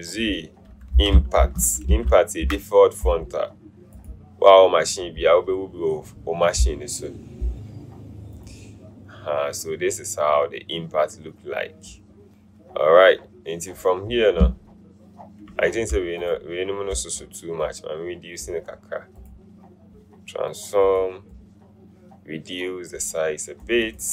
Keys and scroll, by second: 0.9-3.0 typing.